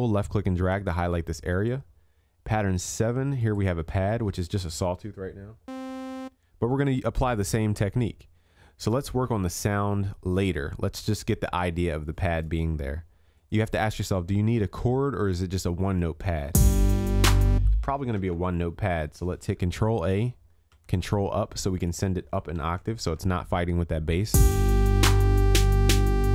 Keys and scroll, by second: 18.2 ctrl+a, 20.7 ctrl+Up, 22.6 ctrl+s.